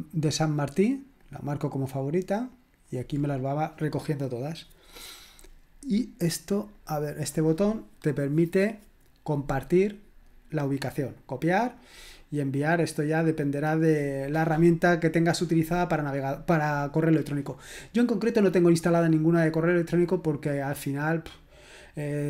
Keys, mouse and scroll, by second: 1.1 click, 2.8 click, 5.8 click, 6.7 right click, 7.0 click, 7.2 click, 11.7 click.